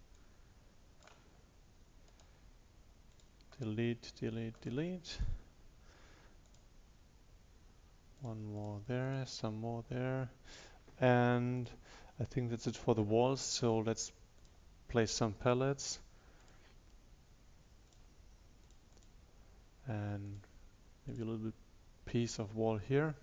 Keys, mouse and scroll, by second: 3.2 click, 3.6 right click, 4.2 click, 4.6 right click, 5.2-23.2 drag.